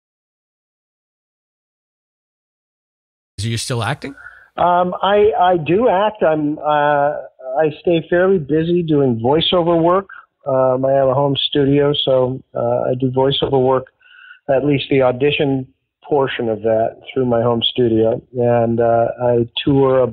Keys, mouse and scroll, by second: 0.5-2.2 drag, 3.2 click, 3.2 space, 5.2 click, 6.0 click, 6.6 ctrl+s, 9.6 click, 11.3 click, 12.5 click, 13.2 ctrl+s, 14.4 click.